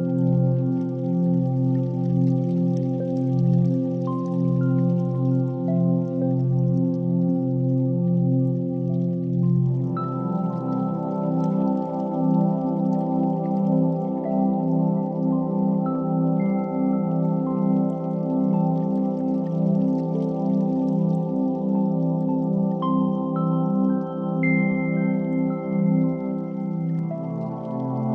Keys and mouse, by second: 1.7 shift+middle click, 2.3 e, 4.1 ctrl+r, 6.8 3, 7.9 i, 9.0 e, 10.5 ctrl+r, 13.0-14.1 middle drag, 15.3 g, 18.2 2, 19.0 g, 21.3-23.1 middle drag, 25.0 s, 27.0-28.1 middle drag.